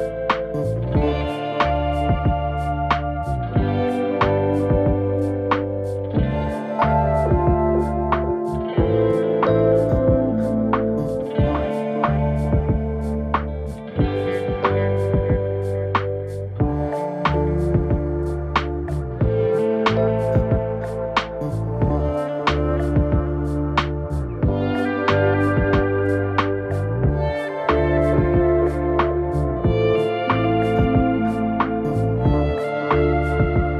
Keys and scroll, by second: 2.4 Left, 2.6 Return, 4.3 Return.